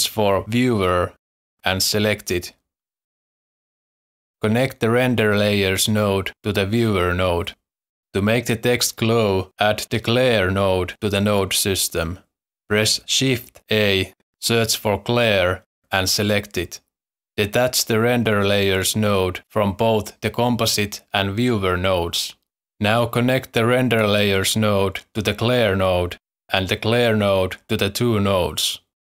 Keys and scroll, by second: 0.7-1.3 typing, 13.0 shift+a, 14.9 shift+a, 15.1 l, 15.4 e.